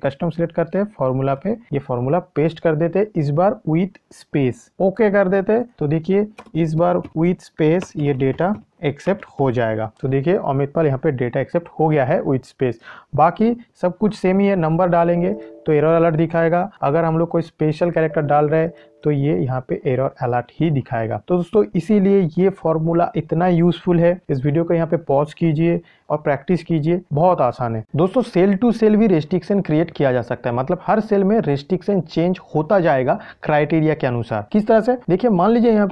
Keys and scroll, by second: 1.6 ctrl+v.